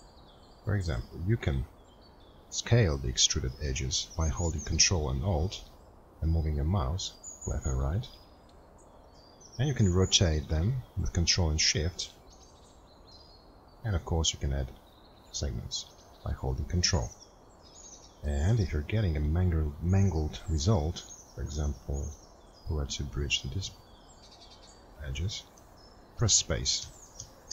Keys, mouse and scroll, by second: 26.2 space.